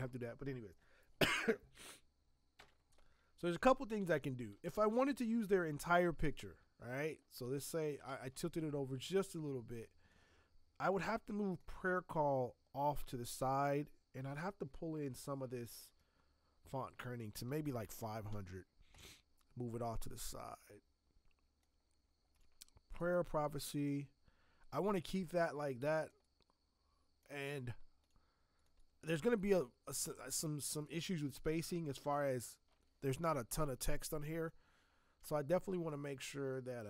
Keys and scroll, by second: 2.5 v, 5.1 ctrl+t, 35.2 space.